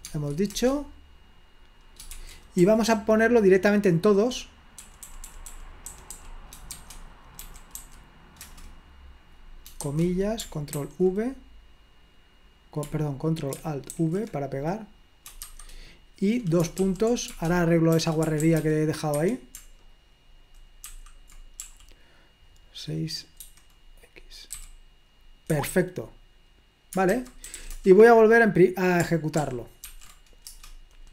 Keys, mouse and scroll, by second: 0.0 Tab, 0.5 Return, 2.0-8.6 typing, 9.7-10.5 typing, 11.2 ctrl+v, 14.2 ctrl+alt+v, 15.5 typing, 17.0-19.1 typing, 19.2 Escape, 20.8-22.3 typing, 23.4 6, 24.6 x, 25.7 Escape, 27.1-28.1 typing, 29.4 ctrl+p, 29.9 ctrl+p, 30.5 Return.